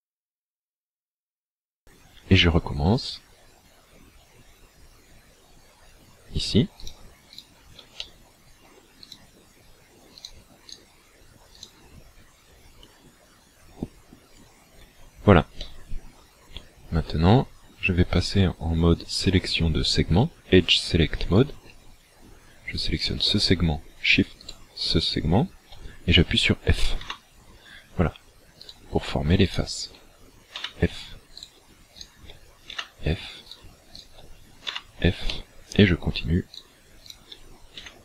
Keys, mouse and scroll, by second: 0.3 shift+right click, 1.0 shift+right click, 2.8 click, 6.9 shift+right click, 7.4 shift+right click, 8.1 middle click, 9.1 shift+right click, 10.1 shift+right click, 10.7 shift+right click, 11.5 shift+right click, 12.8 click, 15.7 middle click, 21.4 click, 23.1 right click, 24.5 shift+right click, 27.1 f, 28.7 right click, 29.5 shift+right click, 30.6 f, 31.5 right click, 32.0 shift+right click, 32.8 f, 33.5 right click, 34.1 shift+right click, 34.7 f, 35.3 middle click, 36.5 right click, 37.1 shift+right click, 37.8 f.